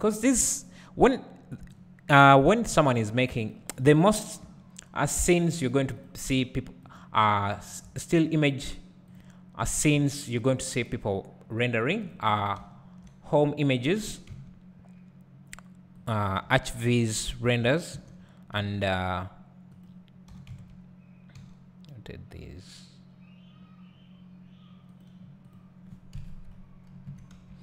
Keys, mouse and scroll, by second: 0.3-1.8 scroll down 1, 1.8-5.6 drag, 5.6 g, 6.1 click, 6.5 g, 7.6 click, 8.0 g, 8.6 click, 10.1 g, 10.9 click, 12.2 ctrl+click, 12.6 `, 14.2 r, 16.4 `, 17.8 g, 19.9 click, 20.5 r, 25.6 click, 26.3 KP_3, 27.1 KP_1.